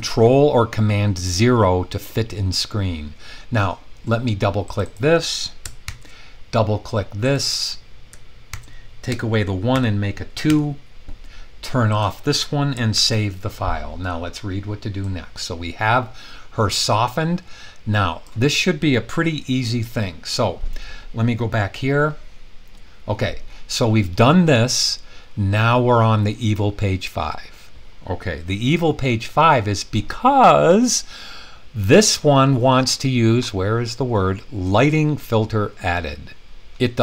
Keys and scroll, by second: 5.8 super+c, 8.5 super+v, 9.7 super+2, 10.4 Return, 12.9 super+s.